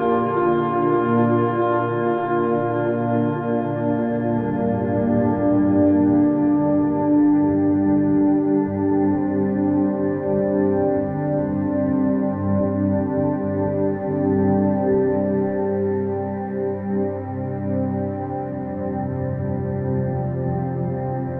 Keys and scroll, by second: 3.6 space, 7.0 space, 11.6 ctrl+KP_Subtract, 12.2 space, 17.1 space.